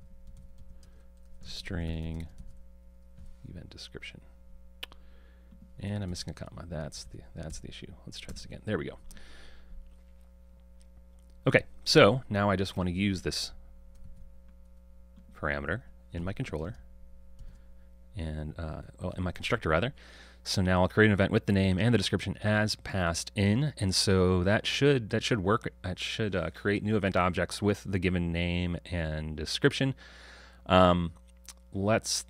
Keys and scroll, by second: 2.4 super+v, 14.1 super+c, 20.8 super+v.